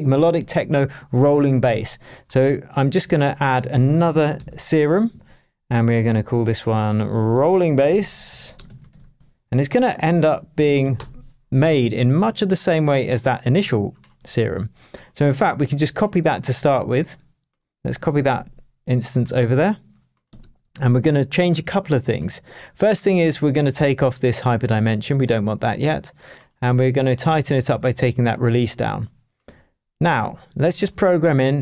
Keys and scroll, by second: 4.4 shift+super+m, 5.1 shift+super+Tab, 5.7 shift+super+Tab, 5.9 shift+super+r, 7.2 super+r, 7.5-10.8 typing, 10.9 Return, 18.1 super+c, 20.4 super+v.